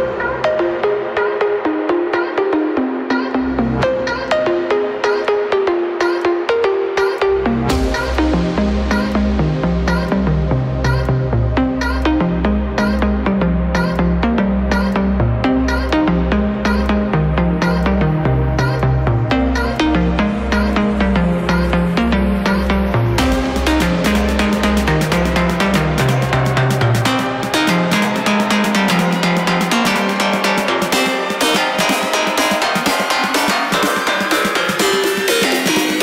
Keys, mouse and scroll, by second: 0.6 click, 1.5 click, 2.2 r, 2.6 a, 3.0 right click, 3.8 right click, 4.3 click, 4.6 a, 5.6 right click, 6.2 click, 6.7 a, 8.8 ctrl+r, 10.5 ctrl+r, 11.9 a, 15.0 Tab, 15.4 Tab, 15.7 right click, 16.2 space, 17.0 right click, 17.1 space, 17.1 Return, 18.1 space, 18.8 right click, 19.1 space, 19.2 Return, 19.8 right click, 20.1 space, 20.1 Return, 20.4 a, 23.3 middle click, 28.2 right click, 28.5 click, 29.5 right click, 29.7 click, 30.0 click, 31.7 right click, 32.7 e, 34.7 click, 35.2 right click.